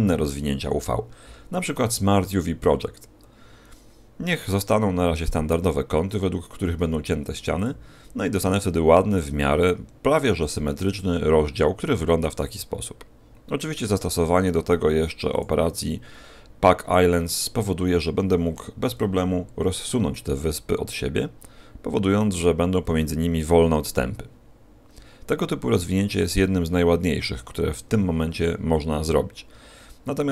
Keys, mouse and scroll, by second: 18.8 t, 20.4 click.